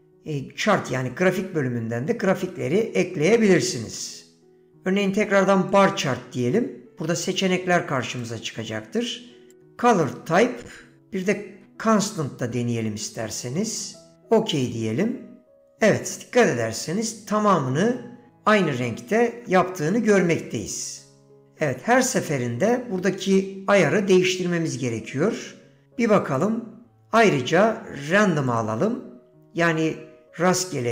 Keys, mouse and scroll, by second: 19.4 ctrl+z, 20.1 shift+a.